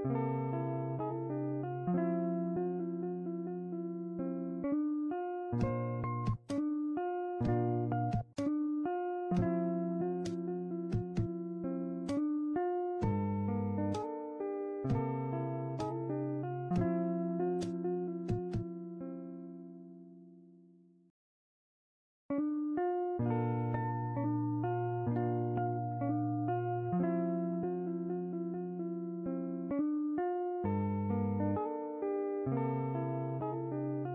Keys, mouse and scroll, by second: 1.0-2.8 drag, 7.2-9.7 drag, 11.2-16.1 drag, 20.6-24.0 drag, 24.8 click, 25.1 shift+middle click, 25.6 click, 26.2 click, 26.9 a, 27.1 ctrl+click, 27.3 shift+middle click, 27.7 click, 28.4 click, 28.8 click, 29.1 click, 29.3 click, 29.9 a, 30.0 click, 30.3 click, 30.6 click, 30.7 click, 30.9 click, 30.9 ctrl+z, 31.1 click, 31.2 click, 31.5 click, 31.7 scroll down 1, 31.9 middle click, 32.2 click, 32.4 click, 32.5 shift+click, 32.8 scroll up 3, 33.0 click, 33.2 click, 33.3 a.